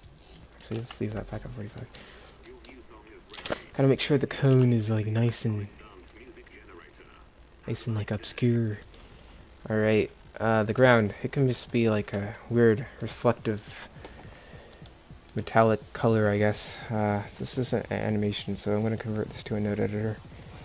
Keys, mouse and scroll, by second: 0.8 ctrl+z, 3.4 KP_0, 4.5 g, 10.2-10.8 drag, 10.8 middle click, 13.1-13.8 middle drag, 20.1 click.